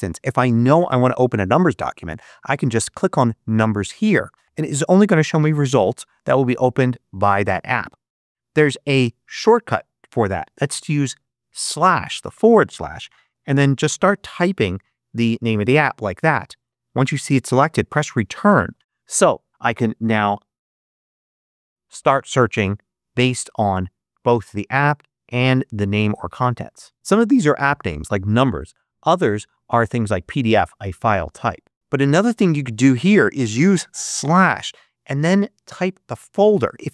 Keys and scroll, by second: 8.8 BackSpace, 11.4 /, 12.9-14.2 typing, 17.8 Return, 20.4-21.6 typing, 34.0 /.